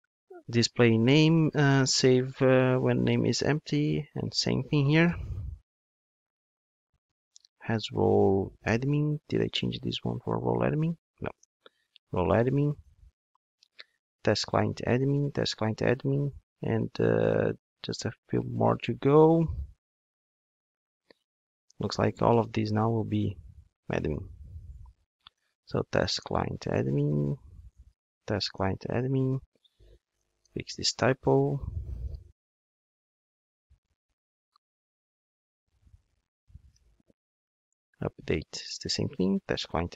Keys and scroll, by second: 5.0 super+v, 14.3 Return, 20.7 super+v, 24.2 super+c, 26.3 super+c, 26.4 Return, 32.0 Return, 32.1 super+v, 37.0 super+v, 39.5 Return.